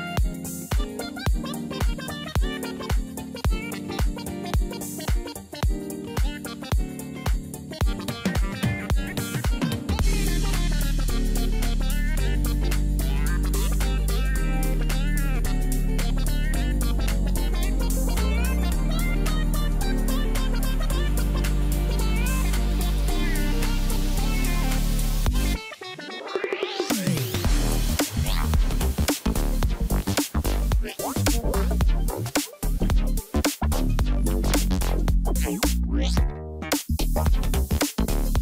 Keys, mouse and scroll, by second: 4.3 h, 5.8 BackSpace, 6.9-7.7 typing, 9.6-12.5 typing, 15.7 ctrl+click, 17.3 ctrl+t, 21.7 ctrl+click, 23.1 ctrl+t, 35.9 double click.